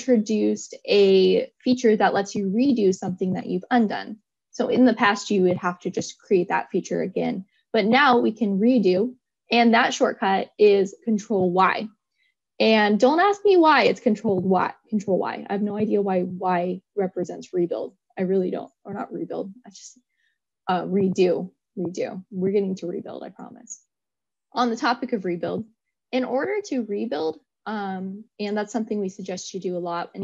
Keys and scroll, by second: 11.5 ctrl+y.